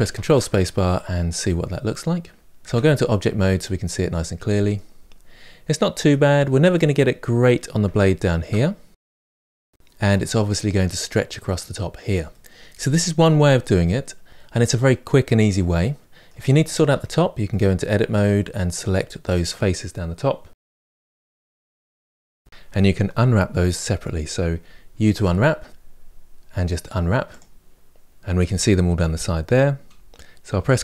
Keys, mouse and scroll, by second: 0.0 ctrl+space, 0.7-2.4 middle drag, 2.4 Tab, 2.9-4.8 middle drag, 4.8-5.6 scroll up 3, 5.6 middle click, 6.1-6.5 scroll up 2, 6.5-16.7 middle drag, 16.7 Tab, 17.3-20.4 middle drag, 20.4 3, 20.6 click, 20.7 shift+middle click, 21.0 ctrl+click, 21.9 ctrl+KP_Add, 22.2-30.8 shift+middle drag.